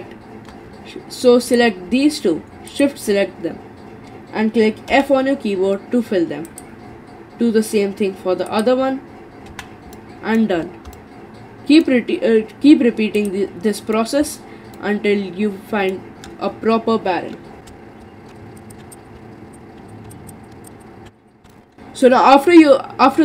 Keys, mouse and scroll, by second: 1.5 click, 2.7 shift+click, 4.9 f, 6.5 click, 8.5 shift+click, 9.5 f, 9.9 middle click, 10.6-11.0 scroll down 5, 11.0-13.2 middle drag, 13.2 click, 13.8 middle click, 14.2-14.8 scroll up 4, 14.8-17.6 middle drag, 17.7 ctrl+b, 18.3 Delete, 18.7 shift+click, 18.8-21.4 typing, 18.9 click, 19.0 shift+click, 19.2 middle click, 19.5 click, 19.8 ctrl+b, 20.4 shift+click, 20.7 click, 20.8 shift+click, 21.3 shift+click, 21.5-23.2 middle drag.